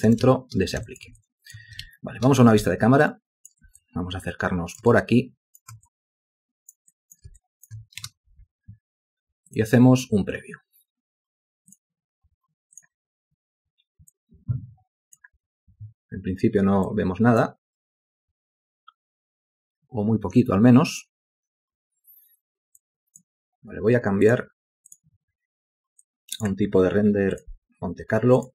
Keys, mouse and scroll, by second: 0.0 alt+shift+click, 0.4 ctrl+space, 1.0 ctrl+alt+click, 2.0 ctrl+space, 3.9 ctrl+alt+click, 5.2 alt+shift+click, 6.0 alt+click, 7.1 alt+click, 7.5 alt+shift+click, 8.2 space.